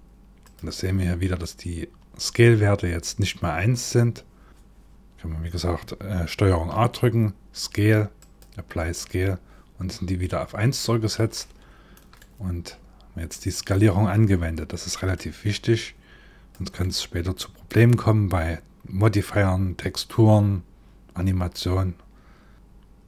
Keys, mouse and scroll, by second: 4.5 ctrl+a, 6.0 ctrl+a, 11.0 shift+middle click, 11.8 middle click, 14.8 click, 16.4 middle click.